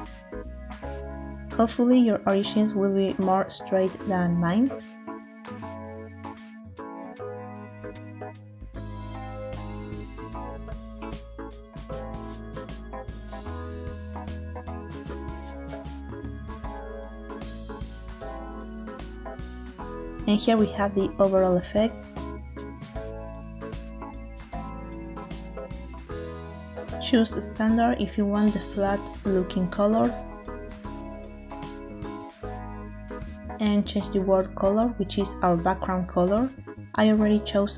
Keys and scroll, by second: 1.2 Escape, 10.1 s, 14.7 i, 16.0 s, 20.3 space.